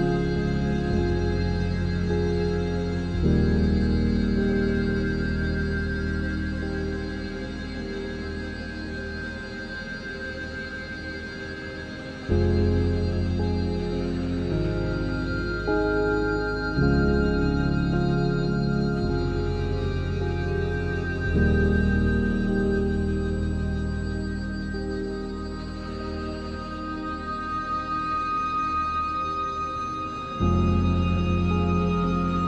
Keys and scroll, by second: 0.1 shift+a, 1.3 s, 2.3-9.0 typing, 7.3 Return, 10.4 7, 11.0 s, 11.1 x, 12.8 s, 13.2 s, 14.5 alt+h, 17.5 a, 18.1 Tab, 18.4 a, 18.6 Tab, 19.3 Tab, 19.6 a, 20.0 alt+s, 21.9 3, 22.9 s, 23.2 ctrl+z, 23.6 alt+s, 25.3 Tab, 27.1 Tab, 27.6 z, 28.8 x, 30.2 x, 30.7 ctrl+s, 31.5 z, 32.3 a.